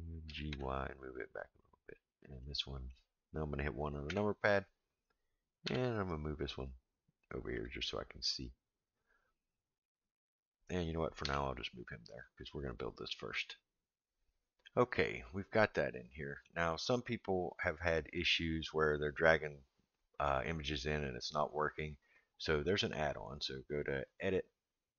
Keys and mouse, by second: 0.2 g, 2.4-2.9 middle drag, 4.1 KP_1, 5.6 g, 9.9 click, 11.2 g, 15.7-16.5 middle drag, 16.7-18.2 middle drag, 24.0-24.9 drag.